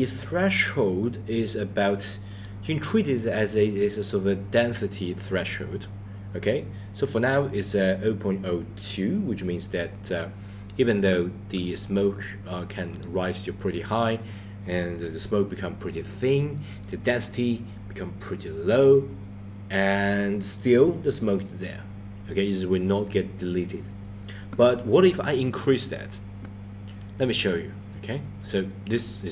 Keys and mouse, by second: 2.5 click, 12.9 click, 27.5 click.